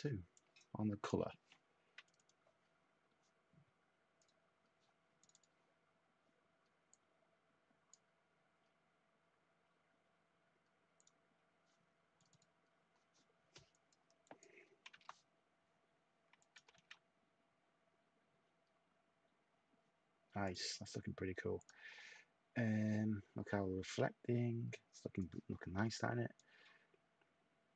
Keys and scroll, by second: 14.8 2, 16.6 1.